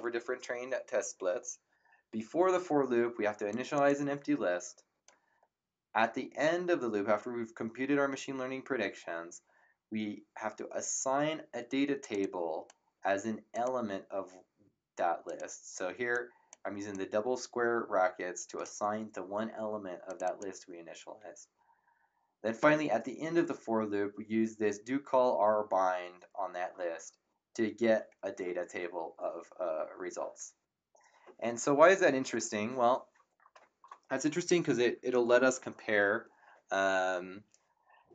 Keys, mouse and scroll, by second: 3.5 click, 12.0 click, 13.5 click, 15.2 click, 20.0 click.